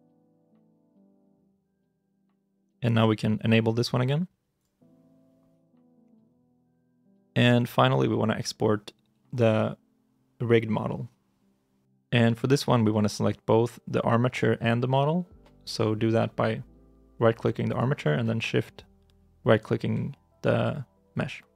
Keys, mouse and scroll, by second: 12.0 shift+middle click, 12.4-14.4 shift+scroll down 1, 17.5 right click.